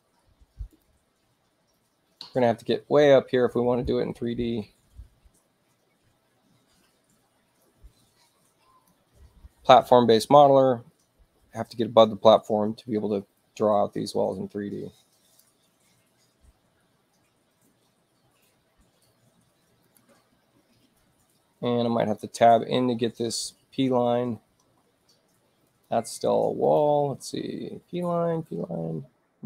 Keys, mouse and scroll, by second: 0.6 click, 3.8-8.9 drag, 13.4-15.4 drag, 19.9 click, 21.3 Return, 22.0 click, 22.7 Return, 25.7 click, 26.6 click, 27.9 Return, 28.6 Return.